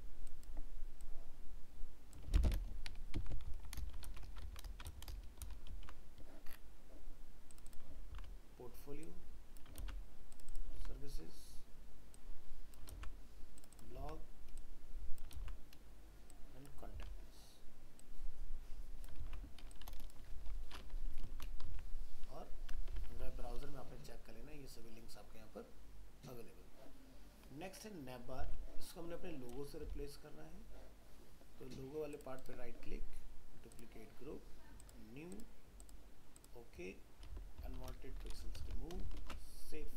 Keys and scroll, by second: 2.2 ctrl+c, 4.1 ctrl+v, 5.1 ctrl+Return, 5.4 ctrl+v, 21.7 alt+Tab, 28.4 alt+Tab, 37.8 alt+r, 38.6 ctrl+alt+0, 39.2 ctrl+alt+shift+s.